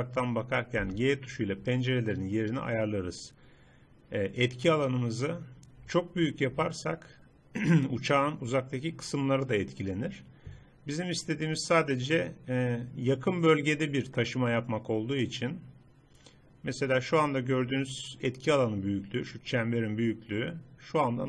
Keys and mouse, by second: 0.8 g, 7.0 middle click, 8.0 middle click.